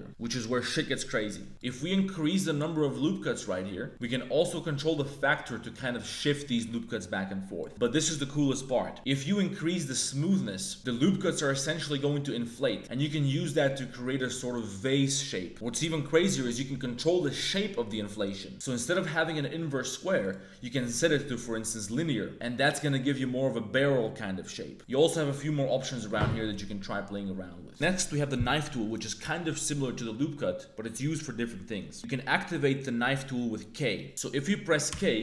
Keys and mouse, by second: 1.5 click, 1.9-3.0 drag, 4.1-7.6 drag, 9.1-10.8 drag, 11.2 middle click, 12.5-14.5 drag, 20.3-21.8 drag, 22.3-26.2 drag, 26.6 click, 34.8 k.